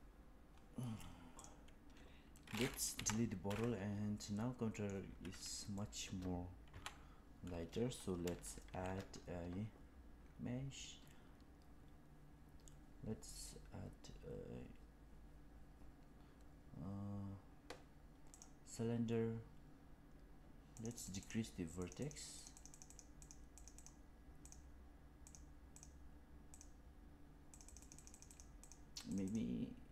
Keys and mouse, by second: 1.3 click, 2.8 Delete, 4.1-4.8 middle drag, 5.7 middle click, 6.6 KP_1, 8.6 shift+a, 20.7 click, 20.8 click, 20.9 click, 21.1 click, 21.8 click, 22.3 click, 22.5 click, 22.6 click, 22.8 click, 23.2 click, 23.6 click, 24.3 click, 25.1 click, 25.6 click, 26.4 click, 27.5 click, 27.7 click, 27.9 click, 28.0 click, 28.2 click, 28.6 click, 29.2 click.